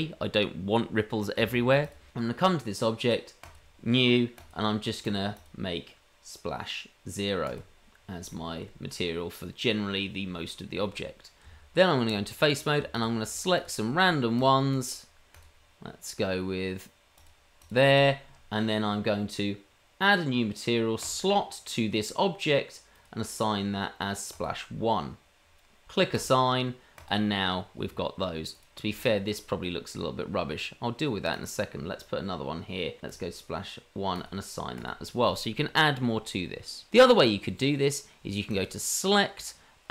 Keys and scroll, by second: 11.4 Tab.